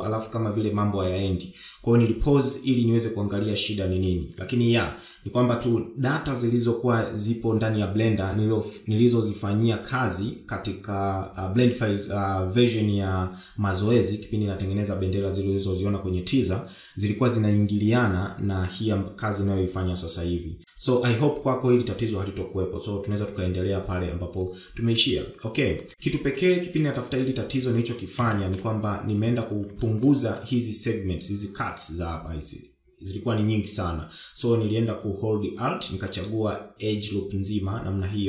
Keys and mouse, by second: 7.4 shift+middle drag, 26.2 shift+middle drag, 27.3 Tab, 28.0 shift+middle click, 28.9 2, 29.5 shift+middle click.